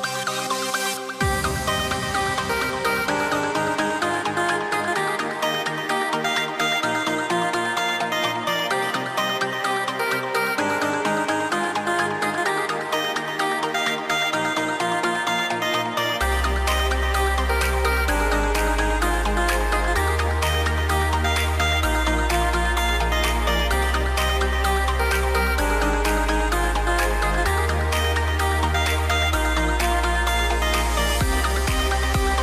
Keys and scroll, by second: 17.1 super+z, 21.5 a, 26.1 a, 29.7-31.1 typing.